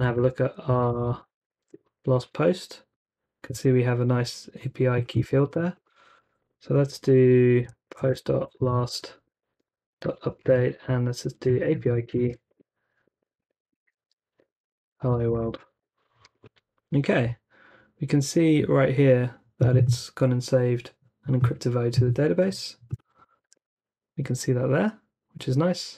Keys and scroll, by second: 0.0-2.1 typing, 5.4 super+c, 7.4-15.9 typing, 17.5-18.2 typing, 23.4 super+r.